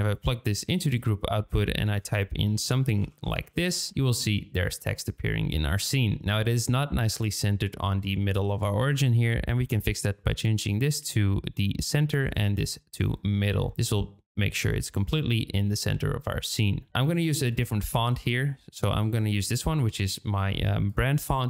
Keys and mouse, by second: 1.8-3.9 drag, 9.8-11.9 drag, 12.2-13.0 drag, 17.5 click.